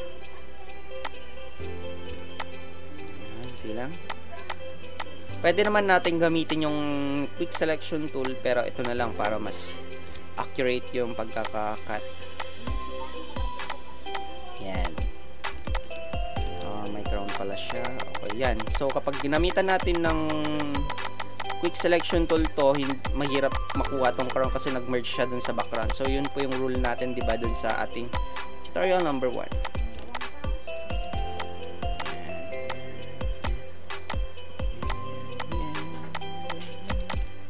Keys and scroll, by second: 2.2 space, 9.0 space, 15.6 space, 30.0 space, 37.0 space.